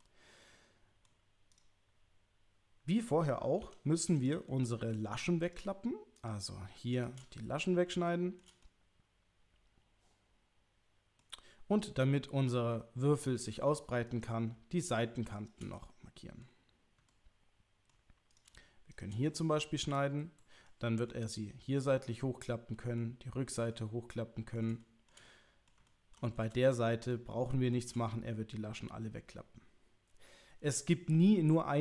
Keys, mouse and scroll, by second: 0.0-1.0 middle drag, 1.5 click, 3.6 2, 4.1 click, 4.5 middle click, 6.2 shift+click, 7.0 shift+click, 8.0 shift+middle click, 8.6-11.2 middle drag, 11.8-13.3 middle drag, 14.2 click, 15.4 shift+click, 15.7 middle click, 17.1 middle click, 18.3 click, 18.9 shift+click, 19.2 middle click, 20.7 middle click, 22.8 middle click, 23.7 middle click, 24.8 shift+middle click, 25.2 middle click, 25.8 ctrl+middle click, 26.4 middle click, 27.3 shift+middle click.